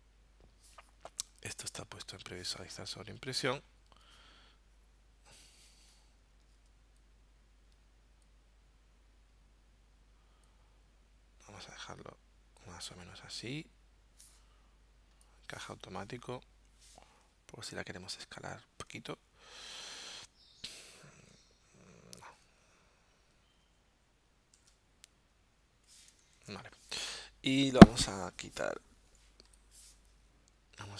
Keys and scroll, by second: 24.6 super+z, 26.4 shift+super+z.